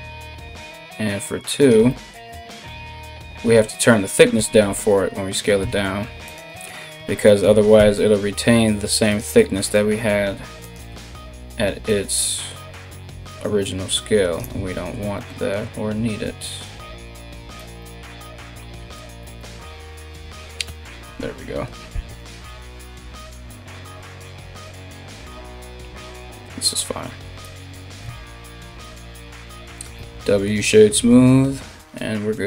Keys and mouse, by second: 2.5 KP_1, 3.0 KP_3, 3.9 g, 5.2 s, 7.4 g, 10.3-17.3 shift+drag, 15.9 s, 18.8 g, 20.2 g, 21.8 KP_3, 23.2 g, 25.0 g, 27.6 a, 27.7 a, 27.8 Tab, 29.5 w.